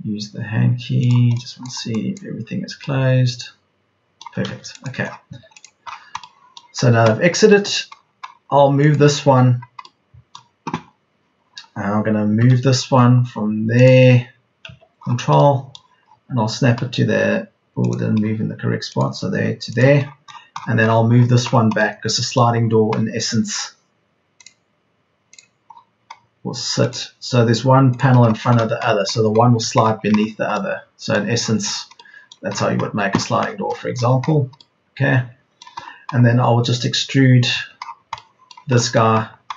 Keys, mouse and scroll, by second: 4.8 space, 5.2 Escape, 12.4 m, 28.0 Escape, 35.8 Escape, 37.5 Escape.